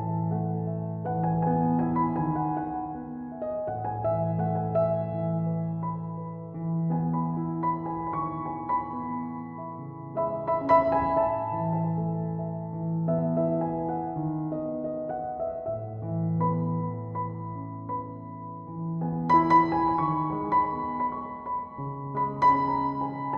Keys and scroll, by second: 9.8 typing.